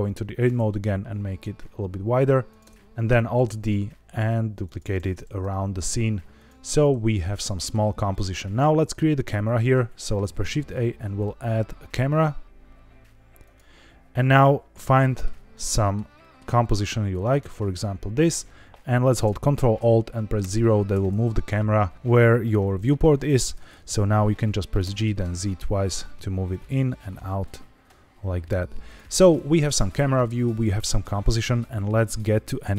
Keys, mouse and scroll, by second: 0.2 s, 0.5 shift+z, 2.4 click, 2.6 Tab, 2.7 middle click, 2.7 scroll down 1, 3.1 alt+d, 3.4 shift+z, 4.6 click, 4.9 alt+d, 5.2 shift+z, 6.3 click, 6.6-7.6 middle drag, 8.3 shift+middle drag, 8.7 middle click, 10.2 shift+a, 14.4 middle click, 14.9 shift+middle click, 15.4 middle click, 16.1 shift+middle click, 16.6 scroll up 1, 17.1 middle click, 20.3 ctrl+alt+KP_0, 24.7 g, 25.0 z, 25.2 z, 26.5 click, 26.8 g, 28.8-29.6 drag.